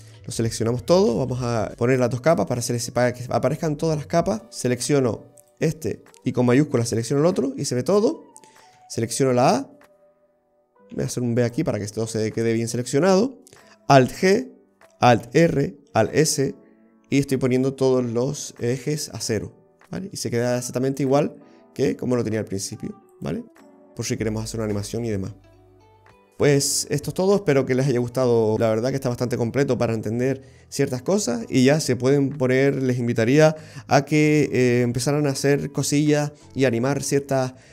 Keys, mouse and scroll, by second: 1.7 click, 1.9 shift+click, 2.9-3.3 scroll up 1, 3.3-4.4 scroll down 1, 4.4-5.4 scroll down 5, 5.4 click, 6.8 shift+click, 8.8 a, 9.4-11.0 scroll up 2, 11.0 b, 14.1 alt+g, 15.3 alt+r, 16.1 alt+s, 20.5 click, 23.2 click.